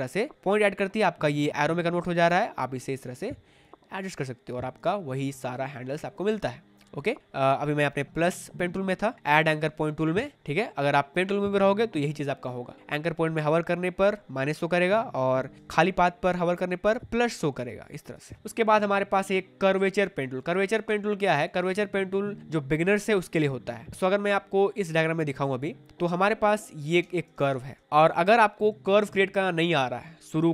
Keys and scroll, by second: 6.2 ctrl+z, 15.5 space, 18.2 ctrl+z, 20.8 space, 25.9 space.